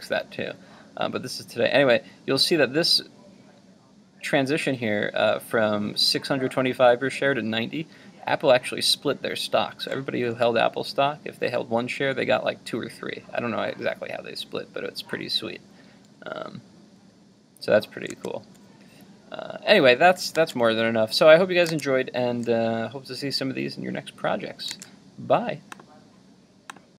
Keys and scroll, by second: 18.1 super+Tab.